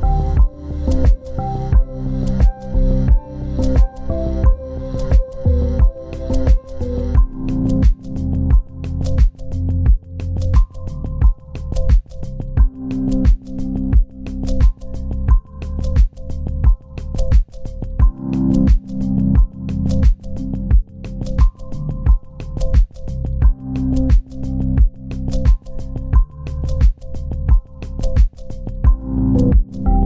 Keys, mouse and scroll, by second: 0.0 scroll down 1, 5.3 ctrl+v, 8.0 scroll up 1, 9.0 ctrl+g, 9.3-9.8 ctrl+scroll down 2, 10.7 z, 11.9 ctrl+space, 13.8 shift+click, 16.9 c, 17.5 double click, 18.5 shift+click, 18.8 c, 22.8-23.3 scroll up 1, 23.7 c, 25.1 c, 27.1 scroll down 1.